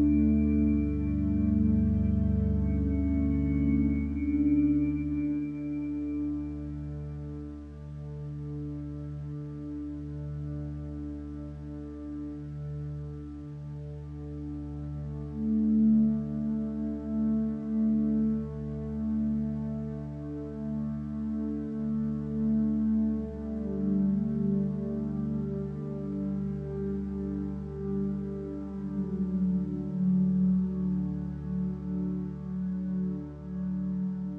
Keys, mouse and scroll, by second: 5.5 ctrl+space, 6.7 ctrl+space, 9.1 ctrl+space, 10.1 click, 12.5 click, 22.9 click, 24.0 ctrl+space, 24.8 click, 25.5 ctrl+space, 25.5 click.